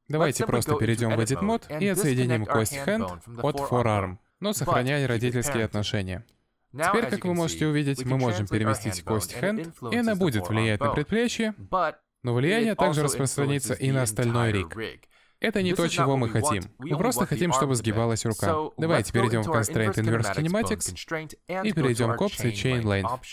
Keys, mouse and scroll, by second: 0.6 click, 1.5-2.6 scroll up 1, 2.8 alt+p, 7.8 middle click, 8.8 click, 9.8 ctrl+Tab, 11.0 g, 19.9 middle click, 20.7 click, 21.2 middle click.